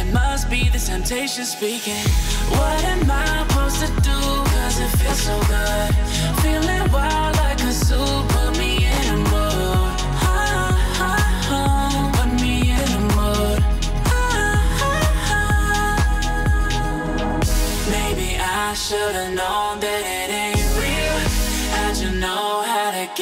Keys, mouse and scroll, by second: 0.0 F7, 0.1-0.6 alt+scroll down 2, 0.6 alt+scroll up 1, 0.9-1.4 click, 1.4 alt+scroll up 1, 1.6-2.0 click, 2.2 right click, 2.5 click, 3.0 alt+scroll up 1, 3.2 click, 3.6-4.1 click, 4.2 alt+scroll down 2, 4.4 click, 5.0 alt+scroll up 1, 5.6 click, 5.9 alt+scroll up 1, 6.4 right click, 6.5 click, 8.3 alt+scroll down 1, 8.4 alt+scroll up 1, 8.6 click, 9.4 scroll down 1, 10.0-10.4 scroll up 1, 10.4-10.8 scroll down 1, 11.1 scroll down 1, 11.6 scroll down 1, 12.1-12.4 scroll down 1, 12.7 scroll up 1, 13.0-14.0 scroll down 1, 15.1 scroll down 1, 16.5 scroll down 1, 17.8-18.2 scroll down 1, 18.9-19.8 scroll down 1, 20.8 click, 22.5-23.0 click.